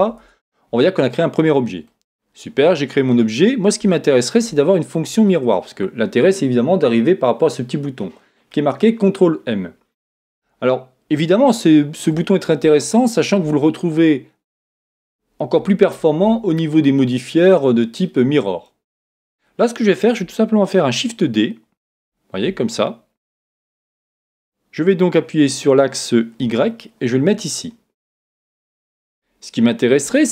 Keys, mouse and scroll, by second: 0.2 Tab, 0.8-5.7 middle drag, 14.1 middle click, 18.9-19.4 scroll down 1, 19.4-20.7 scroll down 1, 20.7-21.9 scroll down 1, 21.9 shift+d, 24.7 shift+d, 29.1 click.